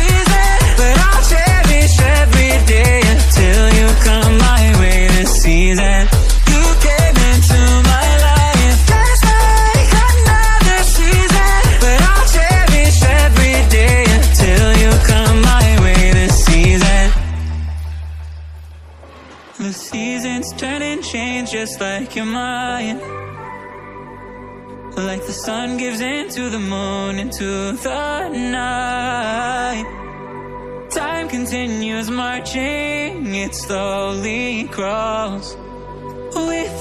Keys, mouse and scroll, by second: 0.2 alt+click, 0.8 g, 3.2 click, 4.3 click, 4.9 alt+z, 5.1 click, 6.2 g, 9.3 click, 10.0 f, 10.2 f, 11.2 g, 14.1 click, 14.3-14.8 scroll up 5, 14.8 alt+click, 15.4 g, 17.0 g, 18.4 alt+click, 18.7 g, 19.9-20.3 scroll down 1, 20.3-20.7 scroll up 4, 20.7 click, 21.8 click, 22.2 click, 23.7 x, 24.6 click, 26.2 click, 27.1 alt+z, 27.6 alt+click, 28.2 click, 29.2 alt+click, 29.8 f, 30.3 click, 31.4 alt+click, 31.7 f, 32.3 click, 33.0 KP_7, 33.5 KP_9, 33.9 Tab, 34.2 drag, 34.5 click, 35.1 shift+a, 36.5-36.8 scroll down 1.